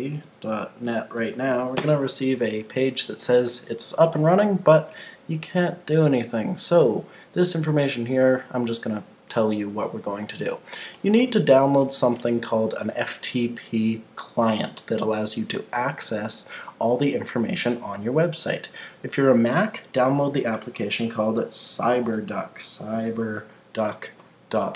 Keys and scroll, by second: 1.7 Return, 21.0 super+t, 23.9 Return.